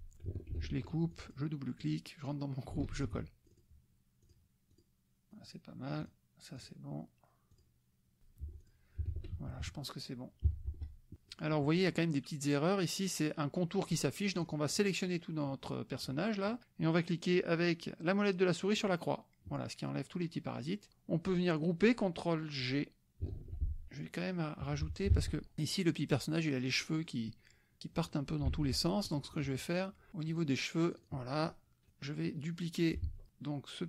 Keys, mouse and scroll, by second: 0.5 ctrl+x, 1.1 ctrl+click, 1.8 click, 2.9 ctrl+alt+v, 3.4 F1, 3.4 click, 4.7 click, 5.3 click, 6.0 click, 6.6 click, 7.7 click, 8.5 F1, 8.6 click, 9.1 ctrl+s, 9.5 ctrl+KP_Subtract, 10.5 Escape, 11.3 click, 11.9 click, 14.3-16.2 drag, 18.8 click, 23.3 ctrl+g, 23.9-25.2 drag, 24.6 KP_Subtract, 25.2 alt+Tab, 26.8 click, 28.0 click, 28.5 alt+Tab, 29.2 click, 30.1 click, 30.5 click, 30.9 click, 31.9-33.2 drag, 33.0 ctrl+z.